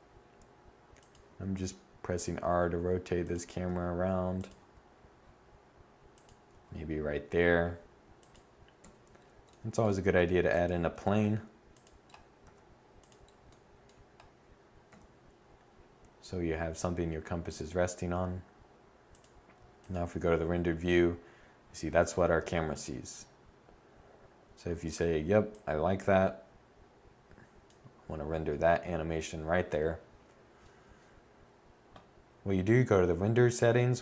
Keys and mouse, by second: 0.8 g, 3.1 r, 4.1 g, 6.0 g, 8.4 1, 10.6 shift+a, 11.9 s, 14.4 0.